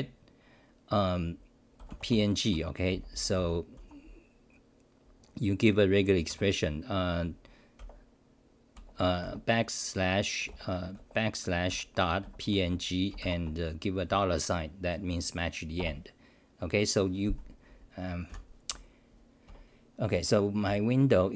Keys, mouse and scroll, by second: 2.5 Home, 2.9 h, 3.8 u, 8.7 BackSpace, 12.2 Right, 15.8 Return.